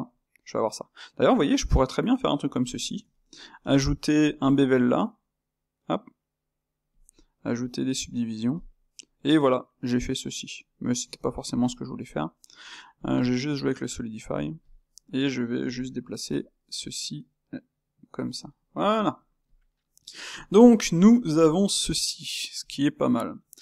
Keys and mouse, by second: 0.6-6.2 middle drag, 8.9-11.7 middle drag, 11.7 space, 13.2 space, 14.8-16.2 middle drag, 16.2 g, 18.4-19.4 middle drag, 19.4 click, 19.7-22.6 middle drag, 22.6-23.6 drag.